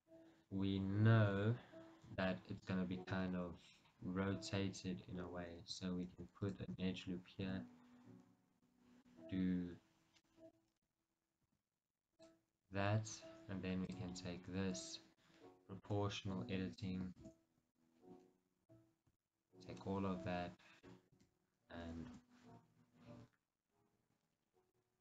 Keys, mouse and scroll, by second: 1.3 KP_3, 3.4-4.1 scroll down 2, 4.1-5.6 scroll up 2, 5.6-6.3 scroll up 1, 6.3 ctrl+r, 6.9 right click, 7.5 g, 11.0 right click, 11.6 r, 12.4 click, 14.1-15.2 drag, 16.0 o, 17.4 shift+z, 17.9-19.5 ctrl+right drag, 21.2 shift+z, 22.3 r.